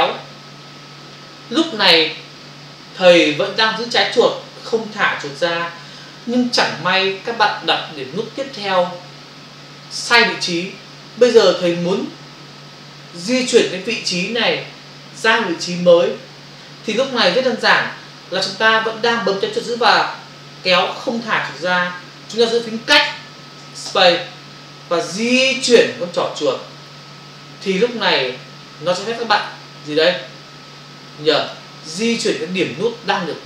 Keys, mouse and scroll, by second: 23.1 space.